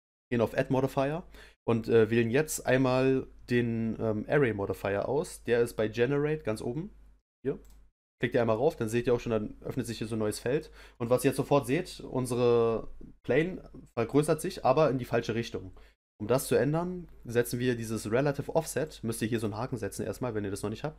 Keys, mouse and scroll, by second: 10.5 scroll down 1, 10.9-14.0 middle drag, 18.8 click, 19.3 click.